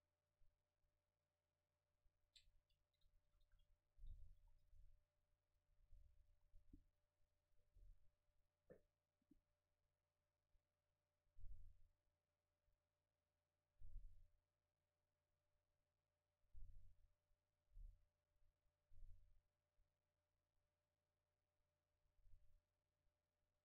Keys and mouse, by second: 2.8 middle click, 3.4 a, 3.5 a, 4.4 ctrl+s, 5.5 F12, 19.4-23.6 middle drag.